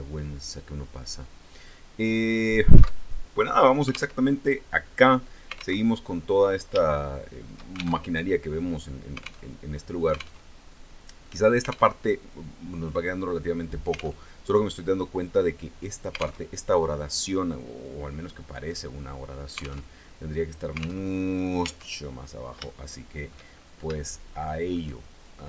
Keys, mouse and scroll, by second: 0.6-2.1 drag, 2.6 alt+Tab, 3.7 alt+Tab, 5.4 alt+Tab, 6.4 shift+click, 7.6 alt+shift+Tab, 9.0 alt+Tab, 10.0 alt+Tab, 11.5 alt+Tab, 13.8 alt+Tab, 16.0 alt+Tab, 18.2 right click, 19.4 alt+Tab, 20.6 alt+Tab, 21.2 Tab, 22.2 shift+middle click, 23.1-23.4 shift+scroll up 2, 23.5 shift+middle click, 23.6 shift+click.